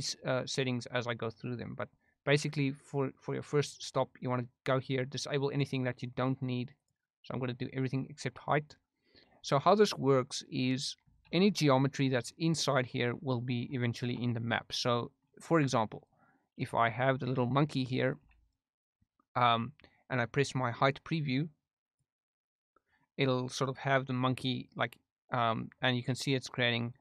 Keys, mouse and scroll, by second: 5.5 click, 6.7 click, 8.7-9.2 middle drag, 11.2 shift+a, 13.9 shift+a, 16.7 s, 17.0 click, 17.2 r, 17.4 r, 18.0 click, 18.1 s, 18.4 drag, 19.0-19.8 middle drag, 22.0 click, 26.9 click.